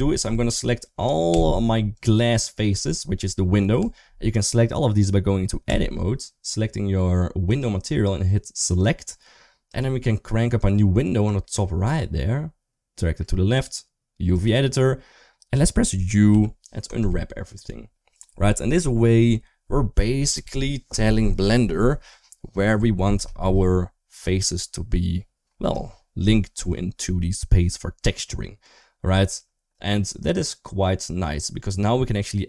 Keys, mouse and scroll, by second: 1.1 Tab, 1.8 click, 3.6 Tab, 7.3 click, 11.2-13.1 drag, 13.3-14.3 drag, 16.1-16.8 typing, 24.1 shift+middle click.